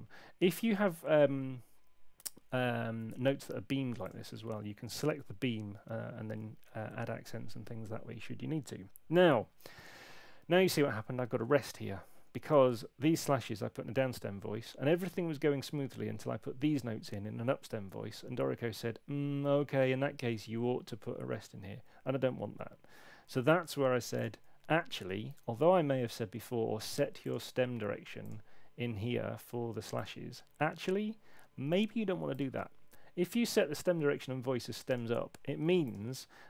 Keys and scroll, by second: 5.5 [, 25.3 super+1.